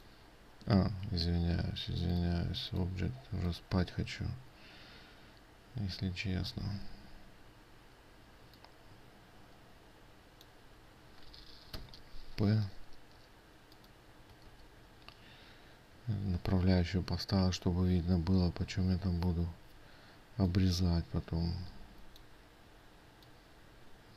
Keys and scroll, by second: 1.3 ctrl+z, 7.2 ctrl+z, 15.1 ctrl+z.